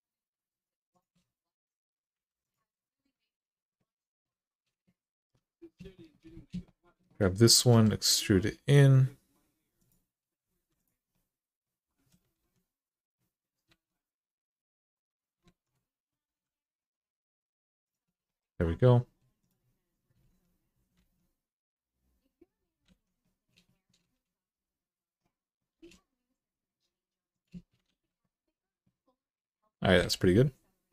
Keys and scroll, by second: 1.9 2, 7.5 e, 10.3 1, 12.1 alt+z, 13.4 alt+z, 15.2 alt+z, 16.0 g, 20.8 alt+z, 22.6 alt+z, 25.5 g, 27.7 alt+z, 29.8 alt+z.